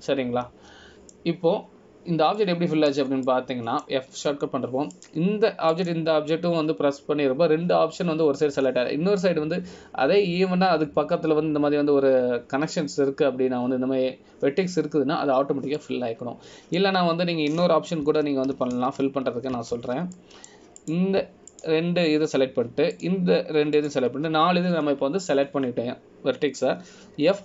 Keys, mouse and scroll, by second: 0.3 f, 1.5 middle click, 5.4 middle click, 7.1 click, 7.9 click, 17.9 middle click, 20.2 ctrl+z, 20.9 ctrl+z, 22.3 middle click, 23.0 click, 23.7 shift+click.